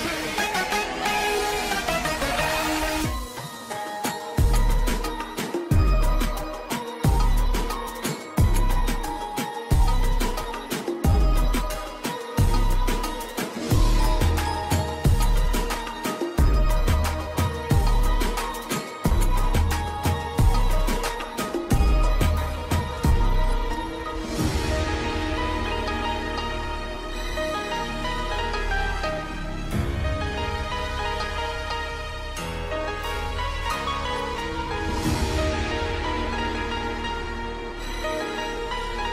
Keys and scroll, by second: 5.6 Escape, 14.2 Escape, 18.1 shift+Page_Down, 23.0 shift+F2, 23.5 Escape, 25.6 Escape, 28.7 e, 29.1 Escape, 29.7 F2, 32.6 Escape, 33.8 F4, 36.8 shift+F2, 37.2 shift+Page_Up, 37.8 F3.